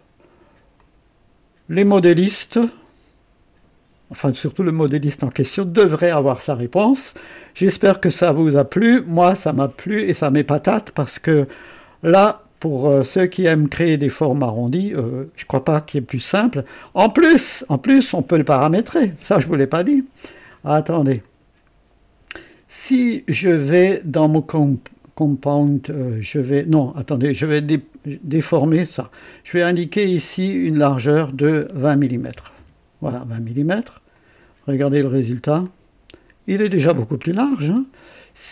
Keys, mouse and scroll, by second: 0.8-2.5 drag, 4.6-7.4 drag, 11.6-17.1 drag, 21.2 click, 23.9 click, 27.4 click, 28.7 right click, 30.6 click, 32.1 KP_2, 32.3 KP_0, 32.5 Return, 32.7 KP_Enter, 34.1 click, 35.6-38.0 drag.